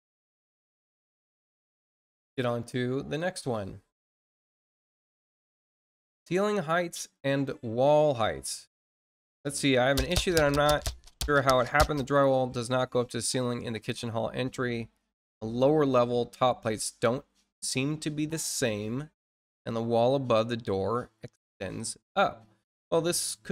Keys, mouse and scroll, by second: 3.1 click, 6.1 click, 8.4-8.9 scroll down 4, 22.3-22.7 scroll down 4.